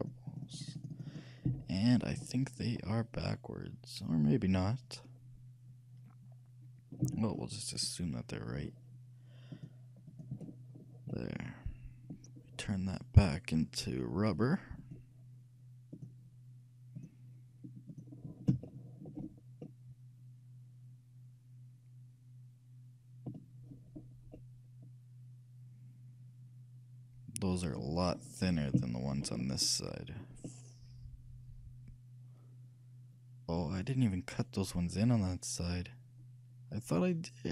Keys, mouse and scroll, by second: 1.6 t, 2.5-4.2 middle drag, 7.1 a, 9.6-11.0 drag, 11.0-14.4 middle drag, 14.4-18.8 drag, 18.8-21.5 middle drag, 23.8-24.5 scroll up 1, 24.5-26.4 middle drag, 28.3-32.5 middle drag.